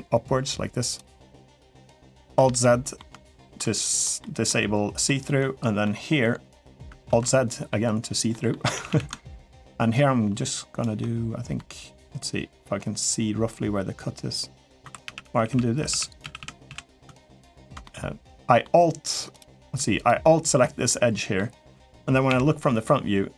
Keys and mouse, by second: 2.0 alt+z, 2.4 middle click, 3.1 shift+middle click, 4.0 middle click, 4.8 middle click, 5.6-6.6 middle drag, 7.0 alt+z, 7.0 middle click, 8.1 middle click, 8.5 a, 8.7 a, 9.8 ctrl+right click, 11.3-14.5 middle drag, 14.8-16.4 typing, 17.0 alt+shift+click, 17.6 middle click, 19.8 alt+click, 20.4 middle click, 22.1 KP_1, 23.2 s.